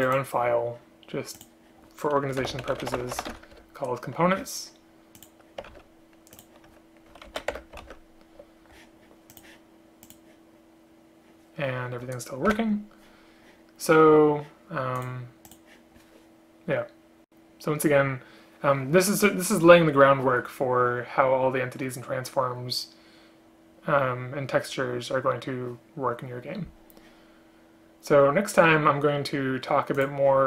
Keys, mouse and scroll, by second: 3.7 Return, 5.8 ctrl+x, 7.4 ctrl+End, 7.6 Return, 7.9 ctrl+v, 12.6 Delete.